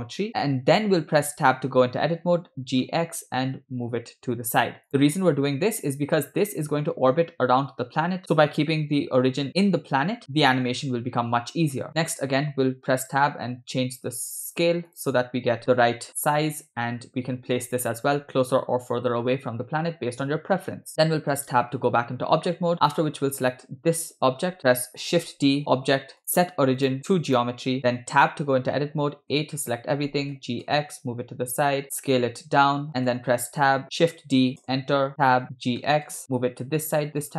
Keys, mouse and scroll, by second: 0.3 scroll up 3, 1.0 Tab, 2.6 g, 5.8 Tab, 12.1 Tab, 13.1 s, 15.7 g, 21.2 Tab, 21.7 scroll down 2, 22.5 shift+middle drag, 22.7 scroll up 1, 23.0 click, 25.1 shift+d, 26.2-27.6 drag, 28.1 Tab, 29.5 a, 30.3 g, 32.1 s, 33.2 Tab, 34.3 shift+d, 35.3 Tab, 35.9 g.